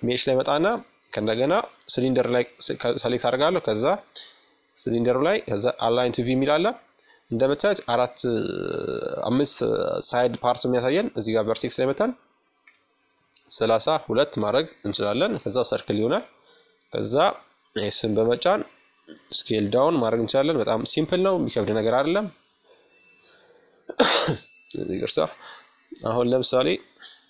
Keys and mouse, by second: 2.2-12.4 drag, 13.8 Tab, 15.1 s, 19.1 KP_Add, 22.5 g, 24.6 s.